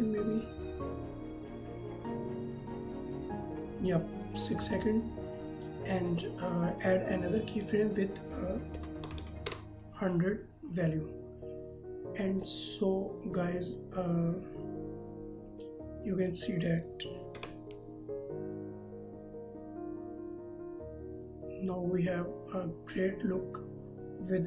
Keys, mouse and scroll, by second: 8.8 KP_1, 9.0 KP_0, 9.5 KP_Enter, 13.8 click, 17.3 KP_0.